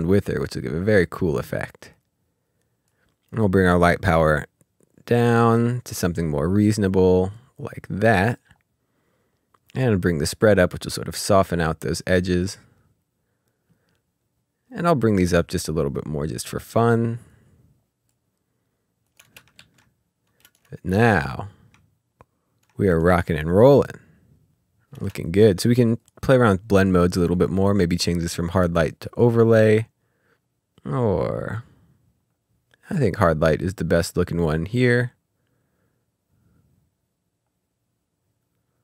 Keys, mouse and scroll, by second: 1.4 click, 4.3 click, 9.9 click, 15.2 click, 19.2 space, 19.5 ctrl+s, 20.4 space, 22.0 scroll down 1, 22.6 space, 24.9 space, 25.2 click, 30.3-32.3 ctrl+scroll down 1, 32.3-34.9 ctrl+scroll up 1, 35.9-38.2 ctrl+scroll down 1, 38.2-38.8 ctrl+scroll up 1.